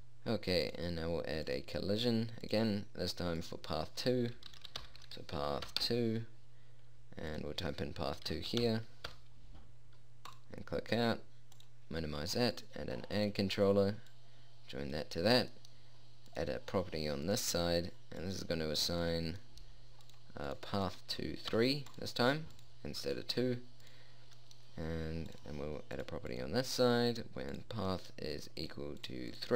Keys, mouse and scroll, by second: 7.0 middle click, 16.1-17.9 drag, 20.4-29.5 drag.